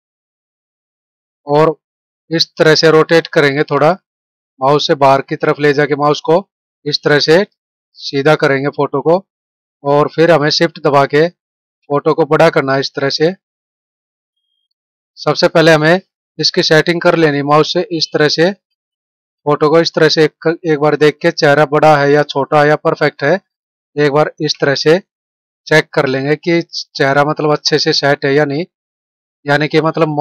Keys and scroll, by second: 14.5 ctrl+=, 18.8 ctrl+-, 27.1 Right, 27.8 Up.